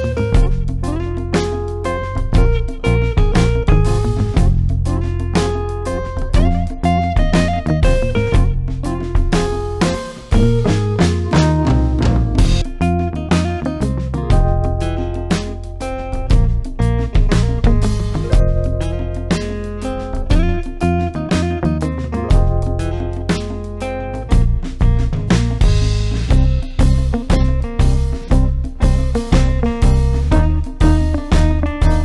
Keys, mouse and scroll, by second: 2.7 click, 4.7 Tab, 11.1 click, 24.4 click, 30.5-32.0 drag.